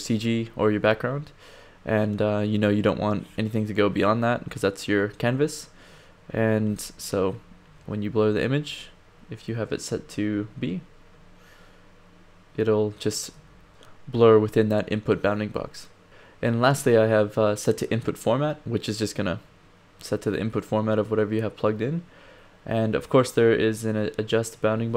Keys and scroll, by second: 7.8 1, 9.5 1, 13.3 d.